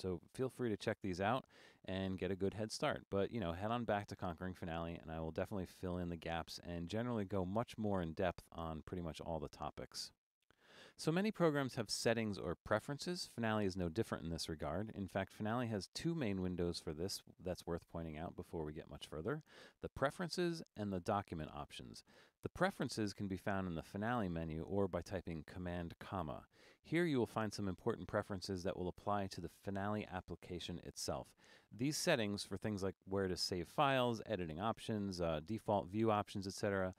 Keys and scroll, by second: 26.4 super+,.